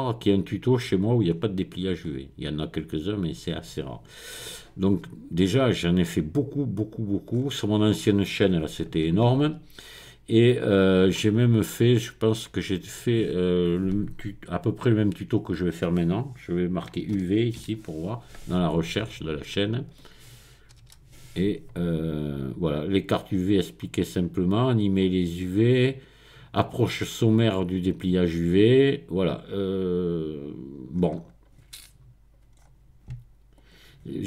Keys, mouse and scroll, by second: 1.3-3.1 scroll up 6, 6.4-7.3 scroll down 4, 7.4-8.3 scroll up 2, 12.1 click, 17.2 u, 17.6 v, 20.8 Return, 23.5-24.5 scroll down 2, 24.9-25.9 scroll down 2, 28.4-29.4 scroll down 2, 29.4-30.1 scroll down 1, 30.9-31.9 scroll up 1, 32.6-33.3 scroll up 3, 33.6 click.